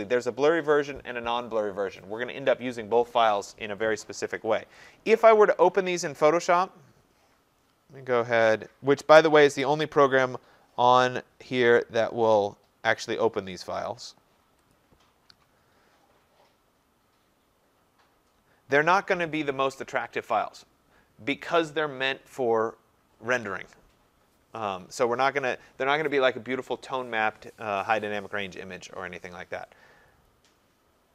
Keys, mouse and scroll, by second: 4.8 click, 5.6 right click, 12.4 click, 13.8 click, 14.7 click.